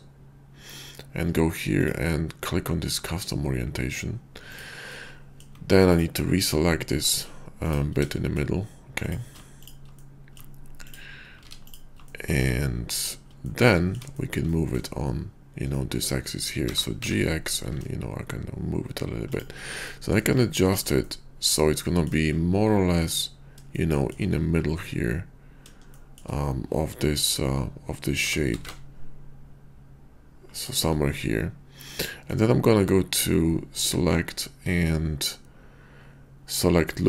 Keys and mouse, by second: 1.6-3.6 drag, 4.8 middle click, 6.3 middle click, 8.2-9.3 shift+middle drag, 10.0 middle click, 11.4 ctrl+z, 11.6 ctrl+click, 12.1 click, 12.9 ctrl+click, 13.3 middle click, 14.1 shift+click, 14.5 middle click, 15.7 middle click, 16.6 g, 17.0 x, 19.2 shift+click, 19.8 click, 20.4 shift+middle click, 21.0 middle click, 21.8 shift+click, 23.9 shift+click, 25.9 shift+click, 28.1 g, 28.5 x, 30.4 shift+click, 31.9 middle click, 33.8-37.0 drag.